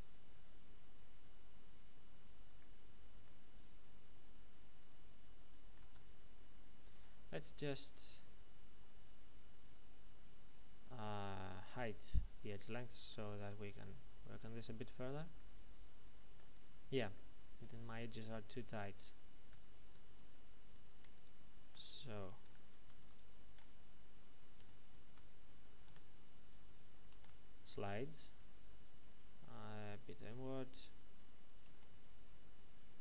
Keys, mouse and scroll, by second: 2.5-3.2 scroll down 1, 3.2 middle click, 5.8 Tab, 8.8 click, 9.2-10.7 scroll up 1, 10.7-11.8 scroll down 1, 11.8 click, 12.6 scroll up 1, 13.0 shift+middle click, 16.6-17.0 scroll up 1, 19.4 a, 21.1 ctrl+shift+right click, 22.4 a, 23.0 alt+shift+right click, 24.6 ctrl+w, 25.8 z, 27.1 ctrl+e, 29.1 click, 31.6 ctrl+e, 32.7 click.